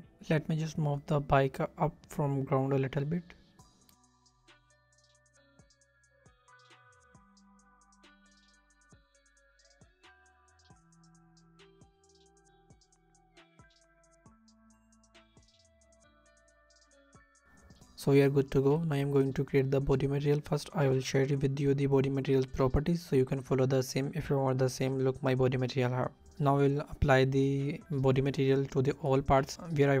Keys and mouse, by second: 1.1 g, 1.2 z, 2.6 click, 4.1 ctrl+z, 4.8 a, 5.5 click, 6.7 ctrl+z, 7.3 Escape, 9.6-10.4 drag, 11.9 g, 12.2 z, 13.9 click, 14.1 g, 14.2 z, 17.5 click, 20.4 click, 21.1-23.7 drag, 25.1 click, 29.9 shift+click.